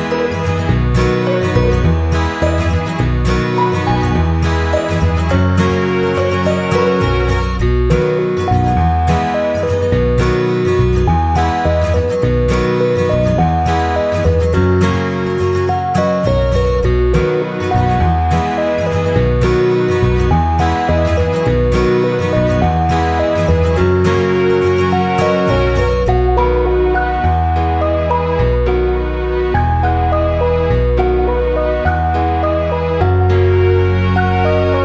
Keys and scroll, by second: 5.0 ctrl+c, 5.1 ctrl+v, 13.3 ctrl+-, 31.1 ctrl+], 34.3 ctrl+].